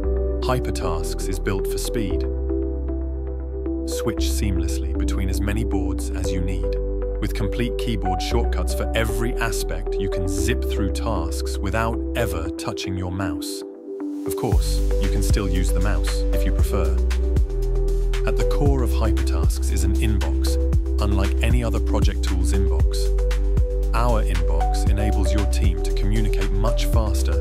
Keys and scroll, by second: 0.3 Return, 0.8-2.5 typing, 2.8 Return, 3.6 ctrl+b, 3.8 w, 3.9 d, 4.1 e, 4.5 Return, 5.8 Return, 6.6 ctrl+k, 8.6 Down, 11.0 s, 11.2 o, 11.4 t, 11.9 Return, 18.6 i, 21.0 Tab, 23.6 j, 24.2 h, 26.3 Down, 26.5 Return.